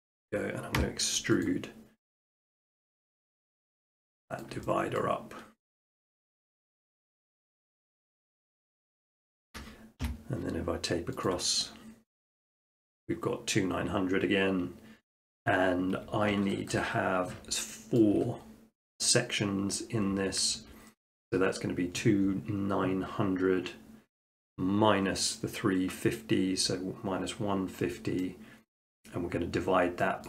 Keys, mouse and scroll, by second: 0.8 e, 1.1 scroll, 1.5 click, 2.4 click, 3.0-3.9 scroll, 4.4 shift+middle click, 5.0 middle click, 7.7 click, 8.3 Tab, 9.2 shift+middle click, 10.0 t, 11.3 click, 15.9 Escape, 18.0-19.3 shift+middle drag, 20.7-21.4 shift+middle drag, 27.9 shift+middle click, 28.8 shift+middle click, 29.1 middle click.